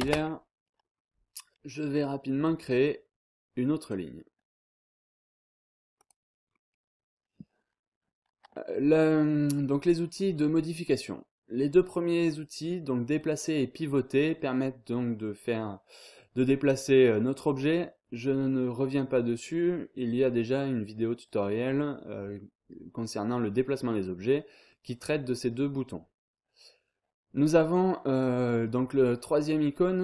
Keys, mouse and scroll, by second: 0.0 space, 0.4 scroll down 2, 0.6-1.1 scroll up 2, 2.4 click, 3.8 click, 6.0 click, 6.5 scroll down 2, 6.6-7.2 scroll up 1.